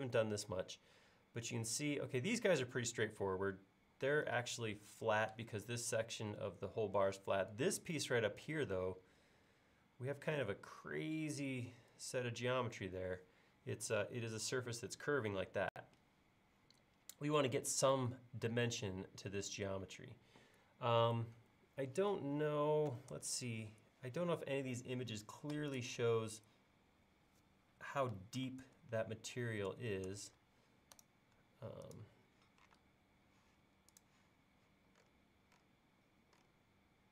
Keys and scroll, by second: 23.1 super+Tab, 28.6 super+Tab, 29.7 super+Tab.